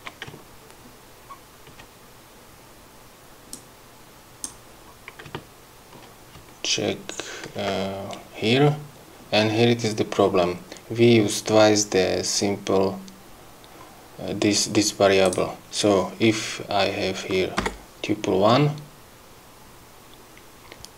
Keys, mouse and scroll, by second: 0.5 ctrl+scroll down 2, 1.3 ctrl+scroll up 2, 3.5 click, 4.9 scroll up 2, 5.4 ctrl+scroll down 2, 7.1 ctrl+scroll down 2, 7.6-8.4 ctrl+scroll up 4, 12.4 scroll up 2, 13.8-14.1 scroll up 1, 15.2 click, 17.6 1, 19.7-20.0 scroll up 2.